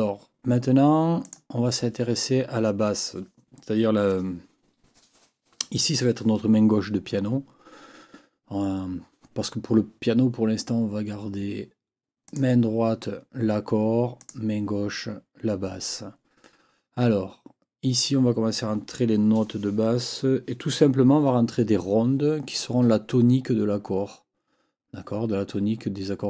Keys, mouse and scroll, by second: 1.2 click, 12.2 click, 14.2 click.